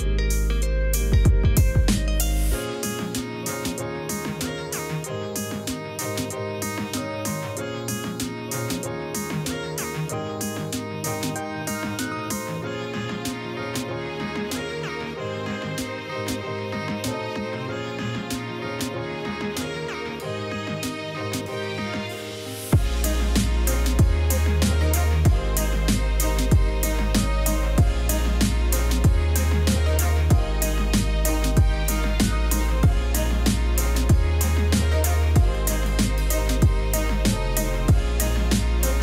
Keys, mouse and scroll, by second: 1.1 ctrl+0, 2.4 ctrl+j, 3.9 ctrl+u, 9.9 Return, 17.0 ctrl+0, 21.0 ], 21.1 click, 22.1 ctrl+z, 23.9 middle click, 25.1 click, 26.8 alt+click, 27.0 click, 27.4 click, 28.6-30.3 drag, 30.8 click, 31.3 Return, 31.6 click, 32.6-34.4 drag, 34.6-35.9 drag, 35.9 middle click, 36.9 click, 37.1-38.6 drag, 38.6 right click, 38.9 click.